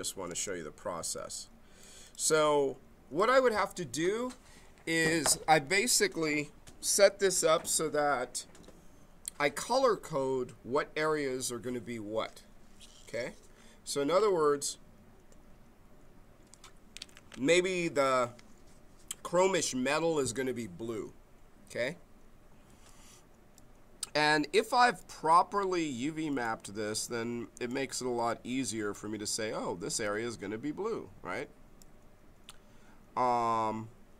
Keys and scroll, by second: 0.3 space.